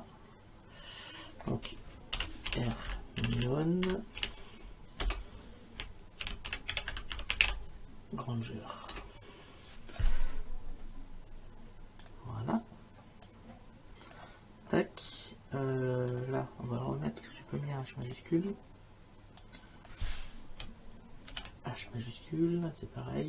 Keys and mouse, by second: 1.9-4.7 typing, 5.0 Return, 6.0-7.9 typing, 8.9 Return, 8.9 KP_Enter, 12.0 click, 13.3 click, 16.1 click, 18.1 click, 19.4 click, 21.3 shift+h.